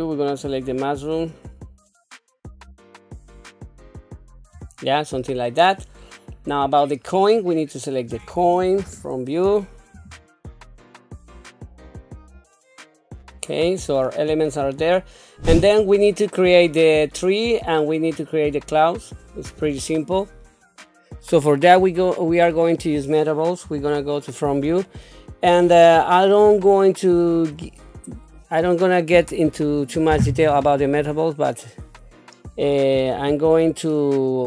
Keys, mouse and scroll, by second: 0.3 click, 1.9-2.9 typing, 2.7 scroll up 3, 2.7 middle click, 3.0 click, 3.2 middle click, 3.4 click, 3.7 scroll down 1, 4.0 click, 4.1 middle click, 4.4 shift+middle click, 5.9 scroll down 1, 6.6 middle click, 7.3 scroll down 1, 8.3 click, 9.1 KP_1, 10.2-12.5 typing, 10.4 scroll up 3, 10.5 shift+middle click, 10.6 click, 11.3 scroll down 2, 11.4 click, 12.0 scroll up 1, 12.2 middle click, 12.2 scroll down 2, 13.0 shift+middle click, 13.2 click, 13.3 middle click, 14.3 shift+middle click, 15.0 scroll down 2, 18.4-19.2 scroll down 1, 22.6 click, 23.6 KP_1, 24.8 shift+middle click, 25.9 scroll up 3, 26.7 shift+middle click.